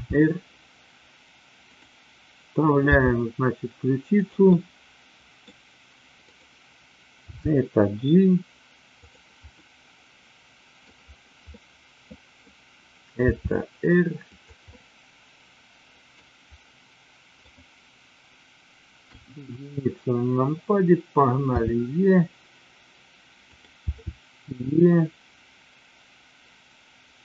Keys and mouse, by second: 0.0 r, 3.0 g, 4.1 click, 4.5-5.5 middle drag, 6.1 r, 7.2 g, 9.6-10.9 middle drag, 11.5-12.5 middle drag, 13.1 r, 14.7-16.1 middle drag, 17.3 click, 19.0 KP_1, 21.5 e, 23.5 click, 23.9 e.